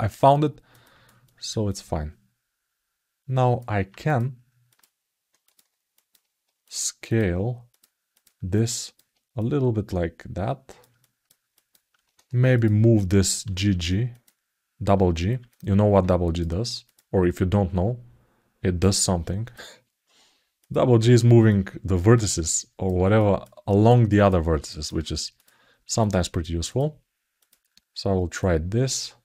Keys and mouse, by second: 0.6 ctrl+alt+middle click, 1.0 alt+shift+middle click, 1.5-3.3 alt+middle drag, 4.5 middle click, 5.2 ctrl+click, 5.7 alt+middle click, 6.4 ctrl+click, 6.9 ctrl+click, 7.5 ctrl+click, 7.9 ctrl+click, 8.3 alt+middle click, 9.2-10.6 drag, 10.7 alt+shift+middle click, 11.3 alt+middle click, 12.3 click, 15.2 alt+middle click, 16.6 click, 18.6 click, 20.4 click, 21.3-22.6 drag, 22.9 alt+shift+middle click, 23.4 alt+middle click, 23.9 alt+shift+middle click, 24.4 alt+shift+middle click, 25.1 click, 25.7 shift+click, 27.1 shift+click, 28.2-29.2 drag.